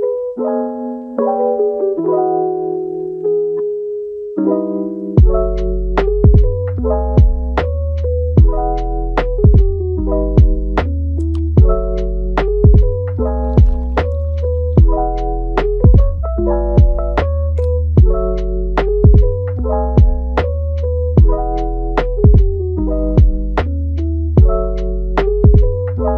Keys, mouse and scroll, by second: 0.2-0.6 middle drag, 0.6 scroll up 2, 0.9-3.3 shift+middle drag, 3.3 click, 4.8-6.0 middle drag, 6.0 KP_1, 6.3-6.7 scroll down 1, 7.2 g, 8.7 shift+click, 9.3 g, 10.6 scroll up 2, 10.9 shift+middle click, 11.5 scroll up 4, 12.5 r, 18.0 g, 18.8-19.6 middle drag, 19.6 g, 20.7-23.3 middle drag, 23.3-24.1 scroll up 8, 24.1-26.1 middle drag.